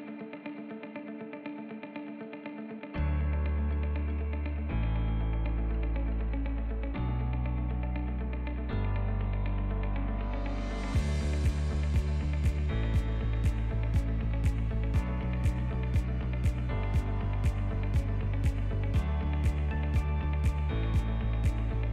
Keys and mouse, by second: 2.0 click, 2.3 middle click, 2.8 right click, 3.9 ctrl+middle click, 4.2-4.8 right drag, 5.9 KP_3, 6.7 ctrl+middle click, 7.3 1, 8.4 shift+click, 9.8 click, 10.9 right click, 11.7 click, 12.8 g, 13.7 click, 15.2 g, 16.7 alt+z, 17.1-18.2 drag, 18.5 g, 20.6 ctrl+click, 21.4 g.